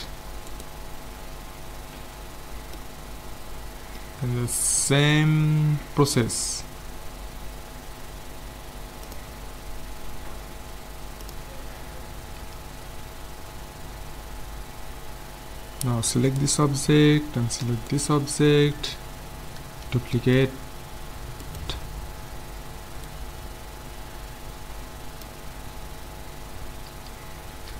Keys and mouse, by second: 2.3 middle click, 2.9-4.5 middle drag, 6.2 z, 12.4 a, 13.2-15.6 middle drag, 16.3-19.7 right drag, 20.2 shift+d, 23.1-24.9 drag, 25.8-27.7 middle drag.